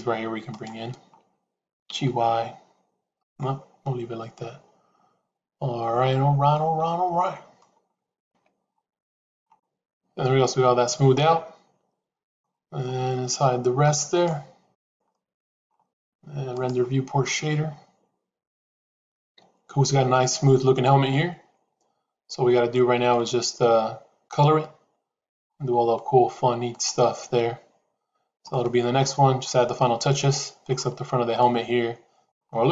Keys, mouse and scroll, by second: 0.4 shift+click, 1.8 g, 6.4-7.5 middle drag, 8.2 Tab, 10.1-12.4 middle drag, 14.0 click, 15.0 middle click, 23.0-25.4 middle drag, 27.6 click, 28.4 shift+middle click, 29.7 middle click, 31.3 middle click.